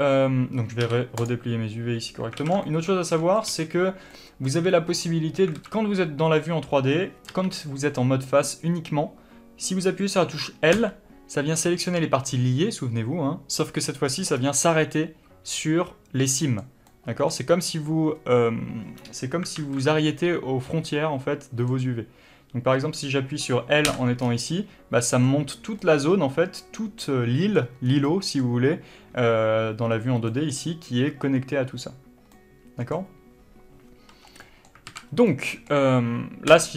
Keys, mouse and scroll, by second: 2.7 alt+a, 2.9 shift+middle click, 3.7-5.9 middle drag, 3.8 a, 4.1 scroll up 1, 5.9 alt+a, 7.6 3, 11.0 l, 11.6 scroll down 2, 11.9 middle click, 14.5 scroll up 1, 14.9-19.9 middle drag, 19.9 alt+a, 20.9-24.2 middle drag, 24.2 l, 24.5 scroll down 1, 28.2 scroll up 1, 28.3 middle click, 35.0 middle click, 35.2 alt+a, 35.5 scroll up 2, 35.9 middle click.